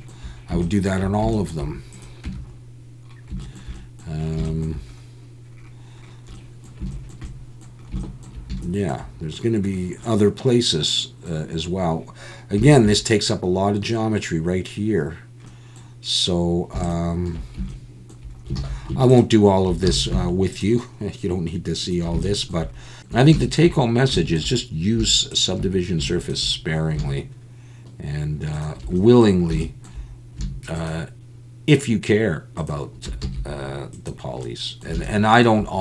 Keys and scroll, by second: 2.3 Tab, 18.6 alt+a, 19.9 alt+a, 33.2 x.